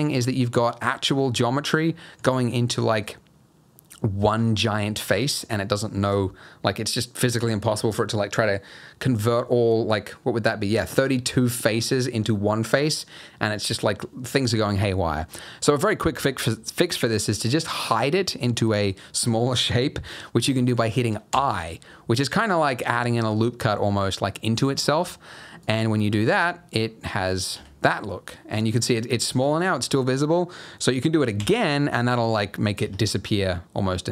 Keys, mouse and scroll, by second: 0.0 scroll down 2, 1.5-2.1 scroll up 3, 2.2 alt+click, 2.6 middle click, 4.8 middle click, 5.1 scroll down 2, 14.8-15.2 scroll up 4, 15.2 scroll down 1, 15.2 middle click, 15.8 middle click, 21.4 i, 26.0-26.5 scroll down 3, 26.5 middle click, 26.7-27.1 scroll up 2, 27.1 middle click, 27.5 Tab, 28.0-29.1 scroll down 2, 29.1 scroll down 1, 29.3 Tab, 29.6 middle click, 30.1-31.0 scroll up 2, 31.5 i, 32.8 Tab, 33.0-33.5 scroll down 3, 33.4 middle click.